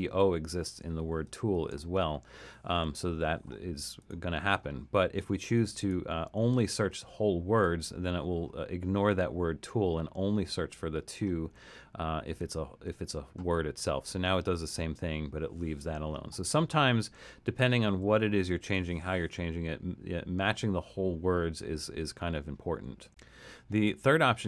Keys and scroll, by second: 1.7 super+z, 17.9 super+z.